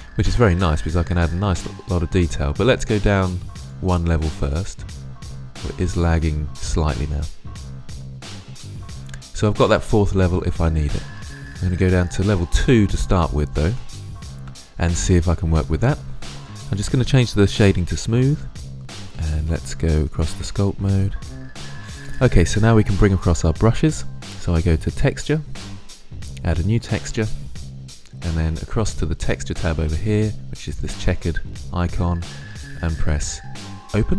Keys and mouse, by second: 3.4-7.8 drag, 11.4-13.5 drag, 13.5-18.0 middle drag.